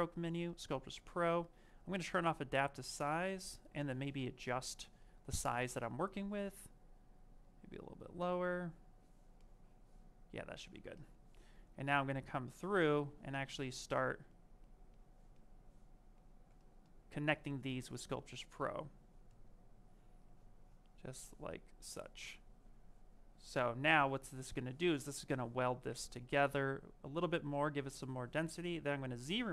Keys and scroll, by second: 6.3 ctrl+z.